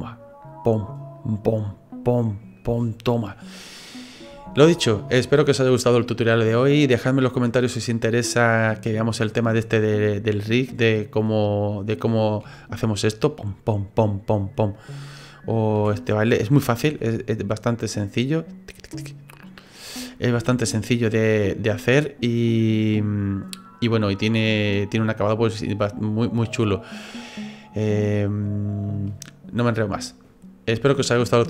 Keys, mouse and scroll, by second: 3.4 middle click, 4.5 ctrl+z, 5.0 middle click, 10.3 middle click, 10.9 middle click, 11.6 right click, 12.5 g, 15.1 middle click, 15.6 right click, 15.8 d, 16.9 g, 20.4 ctrl+z, 20.8 middle click, 21.5 middle click, 22.0 right click, 23.0 click.